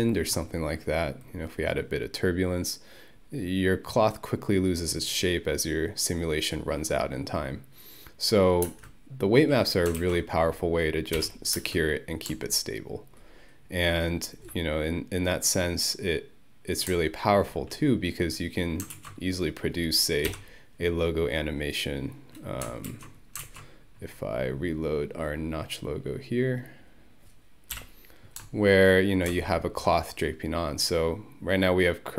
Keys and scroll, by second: 8.7 space, 10.0 ctrl+1, 11.2 Home, 11.6 space, 19.0 ctrl+1, 20.3 Home, 22.9 ctrl+1, 27.8 Home.